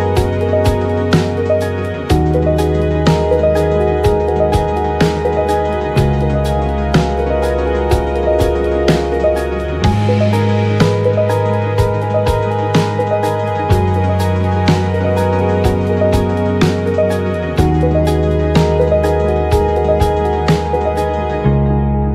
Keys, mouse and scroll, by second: 0.8-1.9 drag, 2.2 click, 3.0-4.4 drag, 4.6-11.9 drag, 8.3 ctrl+s, 8.9 ctrl+a, 9.0 KP_1, 10.3 shift+z, 11.2 g, 11.8 f, 12.0-20.7 drag, 16.6 shift+z, 19.5 KP_1, 20.5 f, 21.1-22.1 drag.